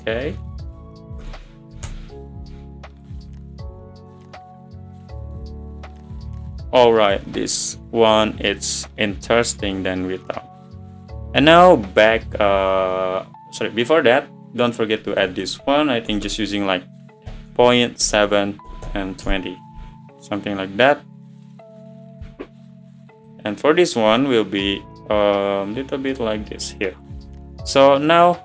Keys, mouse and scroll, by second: 2.2-4.2 drag, 14.8-19.3 drag, 27.2 click.